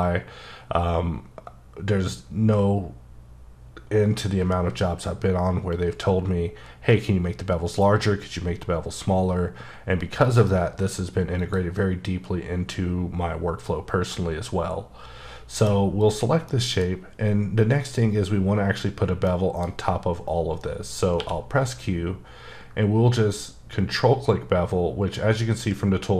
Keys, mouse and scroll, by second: 10.2 click, 11.4 click, 14.1 click, 14.2 middle click, 16.0 click, 16.5 middle click, 16.9 scroll up 2, 19.2 middle click, 21.1 q.